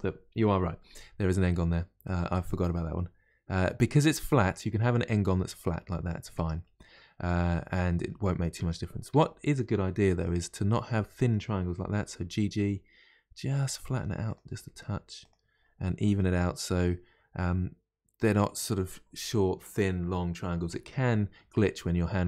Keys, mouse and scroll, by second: 6.3 Tab, 6.6-8.6 middle drag, 8.6 Tab, 9.1 Tab, 9.9 1, 10.1 click, 11.9 g, 14.3 click, 14.4 g, 15.8-18.9 middle drag, 21.9-22.2 middle drag.